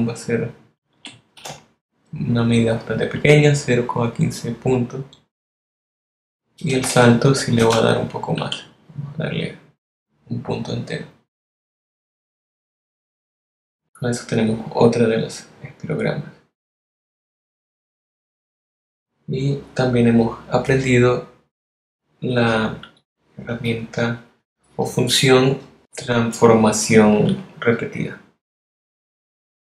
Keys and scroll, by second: 9.3 BackSpace, 11.0 1, 17.3 alt+v, 26.4 z.